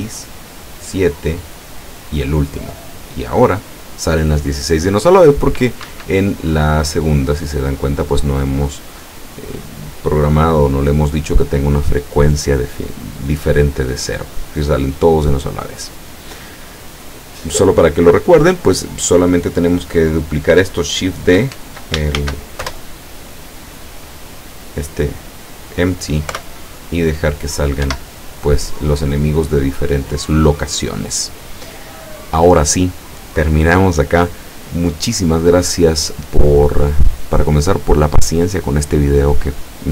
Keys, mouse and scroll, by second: 6.0 Escape, 6.9 click, 7.6 click, 8.9 click, 9.5 middle click, 22.3 ctrl+shift+d, 22.7 shift+Return, 23.7-25.4 drag, 26.4 p, 28.0 Escape.